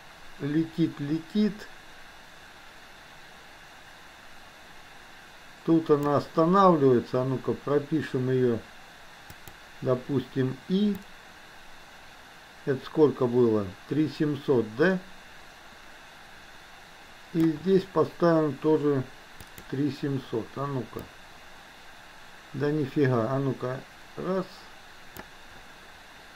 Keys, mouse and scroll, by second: 9.4 click, 11.1-17.5 drag, 21.1-25.3 drag.